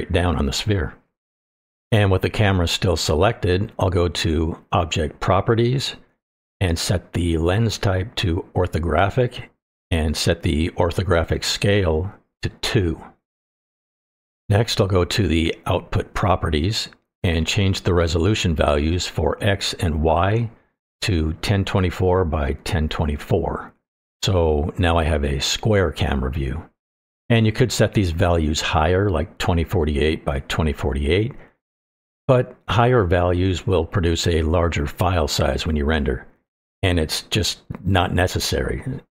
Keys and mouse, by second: 3.6 click, 6.6-8.4 drag, 11.5-12.8 drag, 16.6 click, 18.7-21.0 drag, 21.6-23.8 drag.